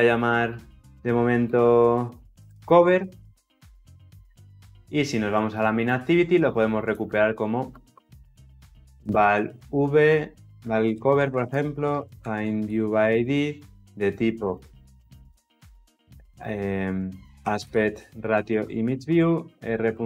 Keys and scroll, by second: 0.0 Return, 12.7 Return, 18.2 Return.